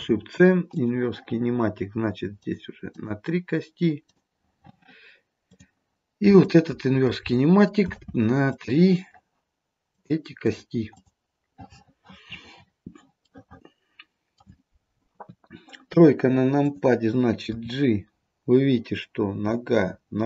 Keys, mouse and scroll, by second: 2.5 click, 3.0 click, 4.2 click, 5.5 click, 6.5 shift+click, 7.0 shift+click, 7.9 ctrl+shift+c, 10.0 click, 10.5 click, 11.1 click, 13.4 middle click, 15.2 KP_3, 16.7 click, 17.6 g.